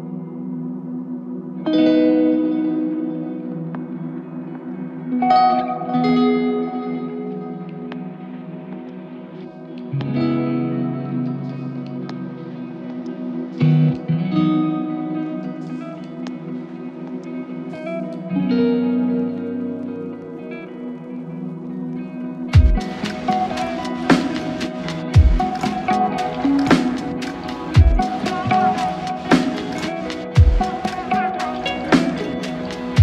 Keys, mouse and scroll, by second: 0.7 ctrl+shift+click, 1.6 ctrl+shift+click, 4.8 ctrl+shift+click, 5.6 ctrl+shift+click, 7.0 ctrl+shift+click, 9.8 ctrl+shift+click, 15.7 ctrl+shift+click, 17.2 ctrl+shift+click, 18.6 ctrl+shift+click, 27.1 ctrl+shift+click, 28.0 ctrl+shift+click.